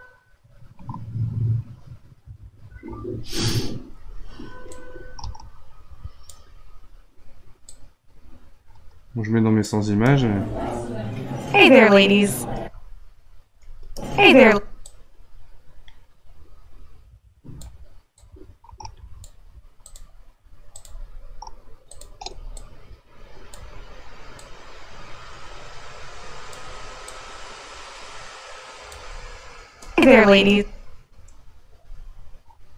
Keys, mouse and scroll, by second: 1.3-3.5 scroll down 1, 3.5 scroll down 1, 4.7-9.9 drag, 9.9 space, 12.5 space, 13.8 space, 14.4 space, 14.8-17.9 drag, 18.1-20.0 drag, 20.7 click, 21.9 shift+click, 22.5-29.8 drag, 29.8 space, 30.5 space.